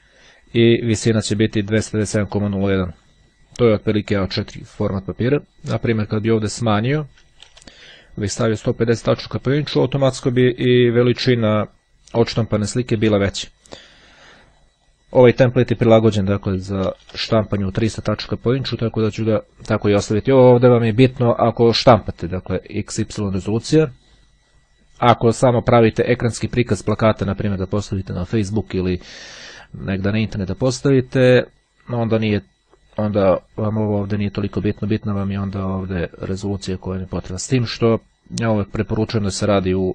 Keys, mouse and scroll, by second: 2.0-3.0 drag, 3.1 click, 4.6-5.8 drag, 6.0 KP_5, 7.6 KP_0, 9.3 click, 13.9-15.3 drag, 15.4 KP_3, 15.6 KP_0, 18.7 click, 35.7 click, 37.7 click.